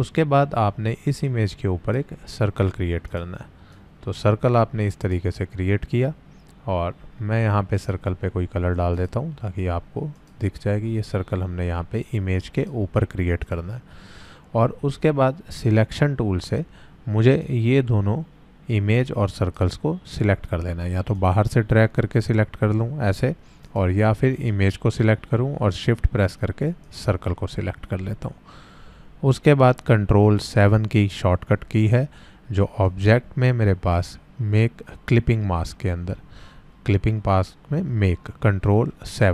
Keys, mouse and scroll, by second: 1.2-2.1 drag, 7.7 click, 12.5 click, 17.4-19.6 drag, 26.8 shift+click, 32.8 shift+click.